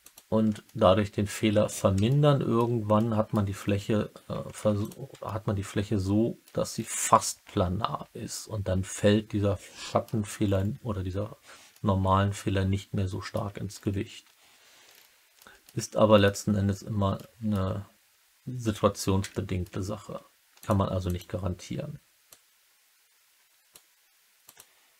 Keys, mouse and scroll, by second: 0.0 click, 0.6 alt+middle click, 0.8 alt+click, 1.3 alt+middle click, 2.0 alt+click, 2.1 alt+middle click, 2.9 middle click, 5.2-6.4 alt+middle drag, 5.2 typing, 7.2-10.0 alt+middle drag, 11.6-13.3 alt+middle drag, 15.3 middle click, 16.1 alt+middle click, 17.1 middle click, 19.2 alt+middle click, 19.9 2, 20.5 click, 21.0 click, 22.2-23.6 drag, 24.4 click.